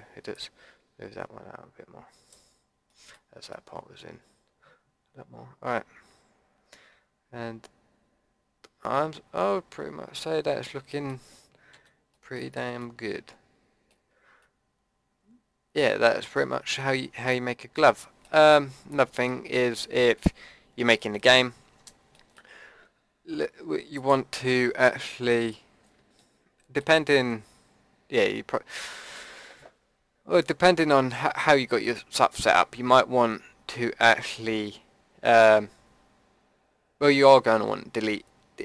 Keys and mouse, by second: 2.5 click, 3.6-4.8 middle drag, 5.5 middle click, 6.2 middle click, 8.3 middle click, 8.7 middle click, 9.1 middle click, 10.2 middle click, 10.7 click, 11.7 a, 12.5 Tab, 23.9-26.1 drag, 30.7-31.8 middle drag.